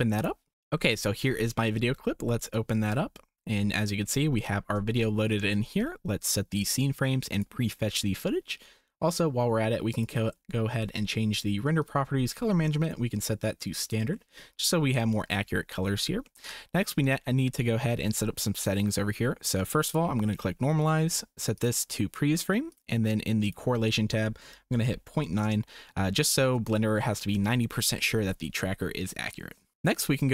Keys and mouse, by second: 4.9 shift+click, 11.8 click, 12.9-13.8 drag, 16.3 shift+click, 19.8 click, 20.9 click, 22.7 click, 23.5-25.5 drag, 26.8 shift+right click.